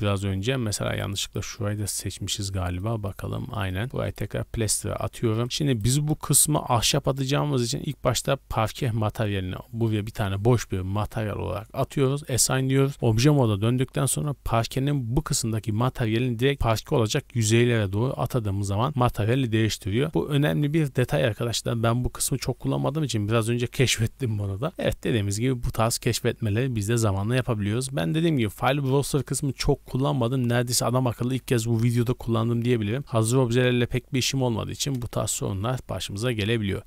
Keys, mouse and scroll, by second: 0.8 right click, 2.6 shift+middle click, 3.0 middle click, 3.0 scroll up 1, 3.5 shift+middle click, 3.7 scroll up 1, 4.0 click, 5.0 scroll down 2, 5.3 shift+middle drag, 5.7 shift+right click, 6.7 shift+right click, 11.6 click, 12.9 Tab, 14.2 click, 18.0-18.9 middle drag, 19.0 middle drag, 20.1-21.5 scroll down 1, 33.9 middle drag, 34.6-35.1 scroll up 1, 35.1 KP_0, 35.8 scroll up 2, 36.3 shift+middle click, 36.5 scroll up 1.